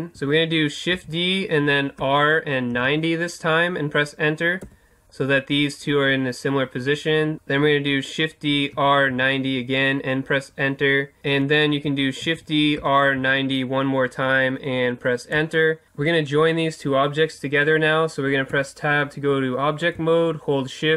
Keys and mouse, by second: 0.9 shift+d, 7.3 right click, 8.7 r, 11.2 ctrl+z, 12.2 shift+d, 18.5 Tab.